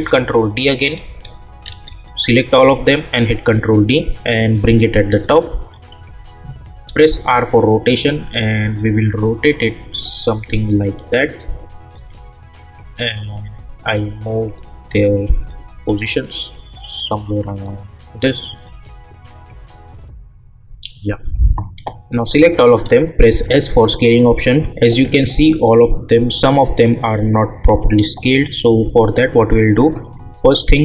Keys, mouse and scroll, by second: 1.6 ctrl+d, 4.0-6.8 drag, 6.8 r, 8.0-20.0 drag, 21.3 click, 22.3 ctrl+a, 23.2 s, 25.6-27.4 scroll up 1, 29.9 click.